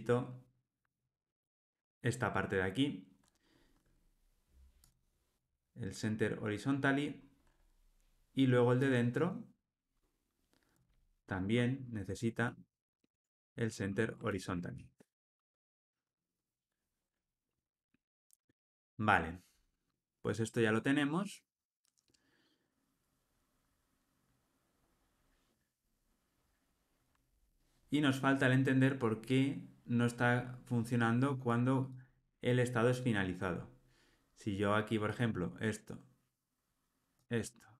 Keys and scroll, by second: 0.4 super+BackSpace, 13.0 Tab, 14.2 alt+super+l.